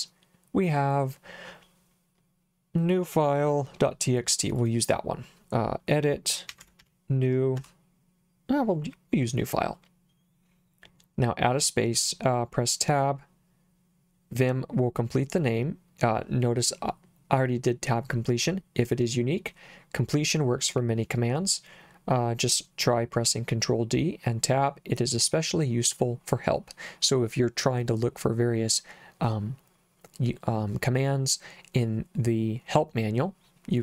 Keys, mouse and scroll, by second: 4.6 click, 6.3-7.3 typing, 7.6 Tab.